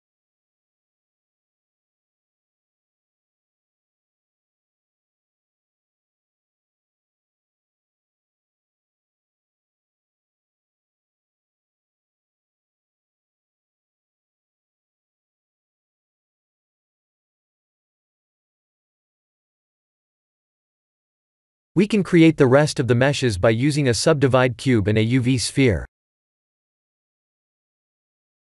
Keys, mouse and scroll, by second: 2.5 middle click, 5.0 ctrl+z, 5.9 click, 7.0 click, 8.4 click, 8.9 click, 10.1 click, 13.2 click, 13.6 middle click, 17.9 middle click, 18.9 middle click, 19.4 middle click, 19.4 middle click, 19.9 middle click, 20.3 click, 21.3 KP_1, 22.1 click, 22.4 shift+a, 25.9 g, 28.1 s.